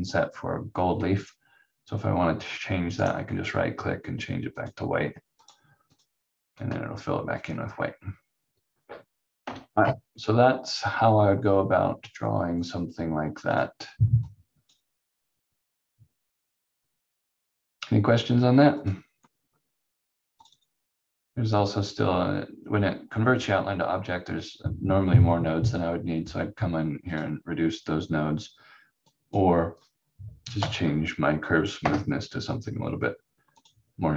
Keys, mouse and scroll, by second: 3.0 right click, 4.5 click, 7.4-7.8 scroll up 1, 7.9-8.3 scroll down 1, 9.4 F4, 13.5 click, 18.8 click, 27.1 click, 30.6 5, 31.8 Return, 33.6 click.